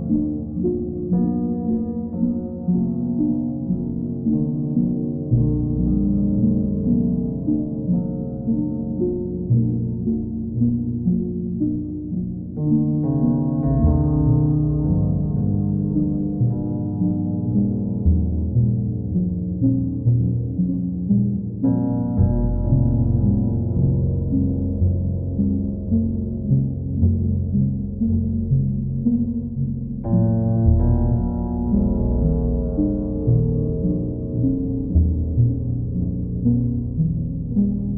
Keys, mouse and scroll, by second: 0.2 click, 1.0 click, 2.5 right click, 5.4 click, 7.0-8.0 drag, 11.3-12.3 drag, 13.9 click, 15.5 alt+click, 16.8 alt+click, 17.2 alt+click, 19.5 alt+click, 20.0 click, 20.4 alt+click, 22.3 click, 22.5 ctrl+z, 23.9 right click, 28.3 right click, 30.6 click, 33.9-35.0 drag, 37.1-37.9 drag.